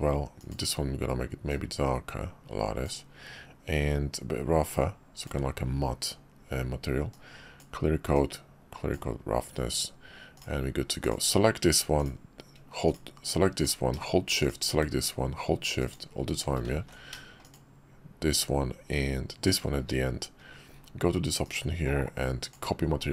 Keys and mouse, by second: 0.4 click, 4.1-5.3 drag, 7.1 click, 8.2 click, 10.3 click, 12.9 drag, 14.4 shift+click, 16.9 ctrl+z, 19.5 shift+click, 21.4-22.5 drag.